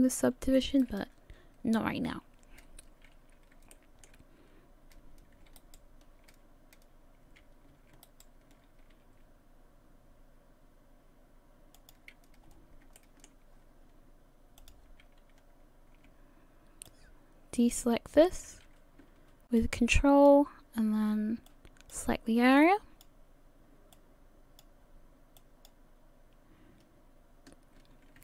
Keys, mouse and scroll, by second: 0.8 right click, 3.7 shift+middle click, 5.6 alt+right click, 8.1 alt+shift+right click, 9.0 r, 12.4 scroll up 4, 13.0 shift+middle click, 14.6 click, 16.9 shift+click, 19.6 ctrl+click, 21.5 ctrl+click, 22.9 ctrl+click, 23.9 ctrl+click, 27.8 ctrl+click.